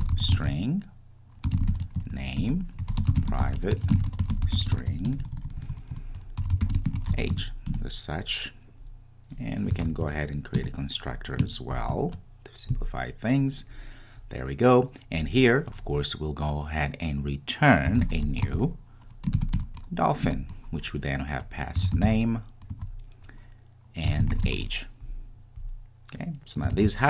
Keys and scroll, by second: 10.0 super+n, 20.4 Return.